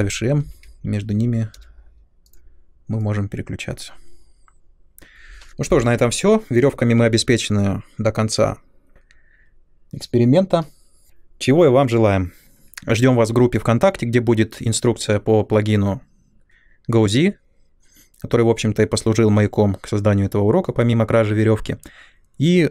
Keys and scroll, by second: 0.5 m, 0.5 BackSpace, 1.5 m.